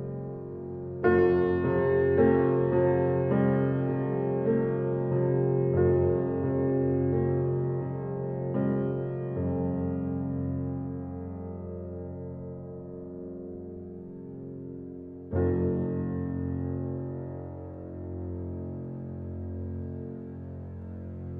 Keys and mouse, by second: 0.0-1.2 drag, 2.6 click, 4.2 click, 4.9 shift+click, 6.2 click, 8.3 click, 9.5 click, 13.1 click, 13.6 click, 14.3 click, 14.7 click, 15.7 6, 16.1 Return, 16.9 click, 17.9 ctrl+z, 19.0 click, 19.9 6, 20.2 Return, 20.7-21.3 drag.